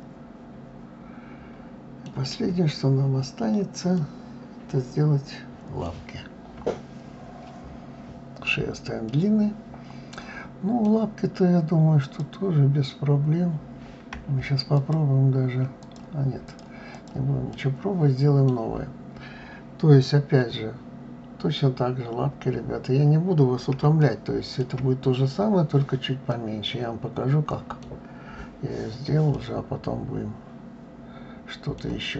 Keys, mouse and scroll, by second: 2.1 scroll down 1, 3.6-6.6 middle drag, 8.7-11.6 middle drag, 11.6 click, 14.4 shift+click, 15.4 click, 16.1 click, 16.5 click, 17.1-20.1 middle drag, 21.9-22.4 scroll up 2, 23.6-28.9 shift+middle drag, 29.0-31.9 middle drag.